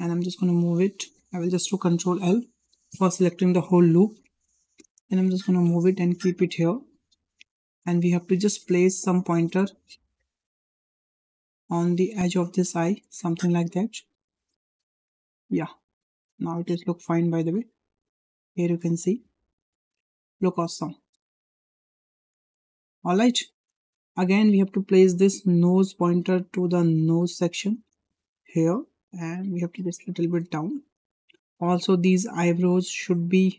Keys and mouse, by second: 2.1 ctrl+l, 5.0 g, 8.9 click, 9.0 click, 9.9 g, 11.7 click, 12.2 g, 13.5 drag, 14.1 g, 15.2 drag, 15.5 g, 16.9 drag, 17.2 g, 18.7 click, 19.1 g, 20.6 click, 21.0 g, 22.0 click, 22.4 g, 24.7-25.4 drag, 26.0-26.5 drag, 27.0 g, 28.8 drag, 29.1 g, 31.0 shift+middle click, 31.9 click.